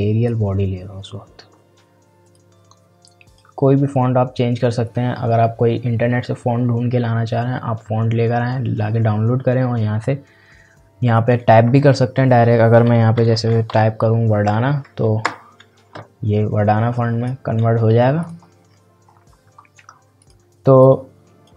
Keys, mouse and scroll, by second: 11.0 click, 13.3-14.2 typing, 16.9 click, 18.7 scroll down 1, 19.0 scroll up 1, 20.2-21.5 drag.